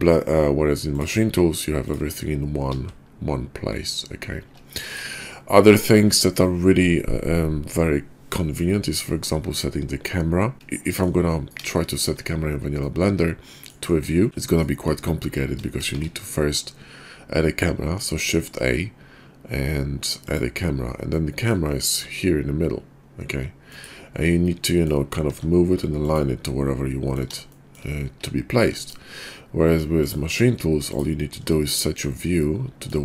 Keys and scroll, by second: 2.9 shift+s.